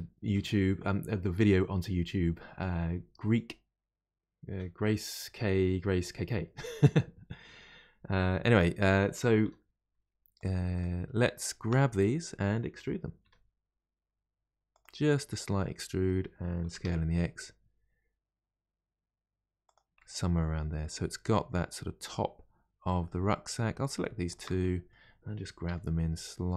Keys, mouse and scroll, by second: 9.5 3, 10.3 click, 10.7 shift+click, 11.4 shift+click, 11.9-13.2 middle drag, 13.2 e, 15.1-16.6 middle drag, 16.6 s, 19.9-23.0 middle drag, 23.3 middle click, 23.8 click, 24.3 shift+click, 24.6-25.6 middle drag, 25.6 g.